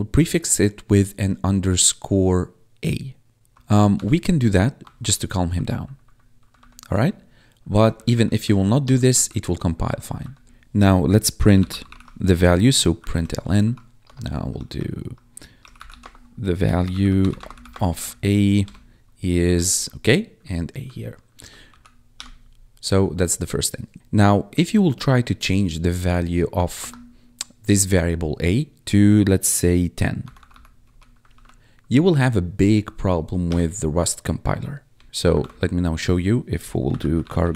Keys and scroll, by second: 3.3 shift+BackSpace, 3.8 shift+-, 4.7 Escape, 5.4 ctrl+s, 5.7 Right, 7.6 ctrl+Left, 8.4 Right, 8.7 BackSpace, 9.0 ctrl+s, 9.7 ctrl+Right, 10.4 Return, 11.3-12.2 typing, 13.0 Tab, 13.5-18.4 typing, 18.6 Tab, 19.3 Right, 19.4 Left, 21.6 ctrl+s, 22.1 Return, 23.9 Return, 26.4 a, 26.7 space, 29.9-30.8 typing, 31.2 ctrl+s, 33.4 Return, 34.8 Tab, 35.0 ctrl+`, 36.5-37.5 typing.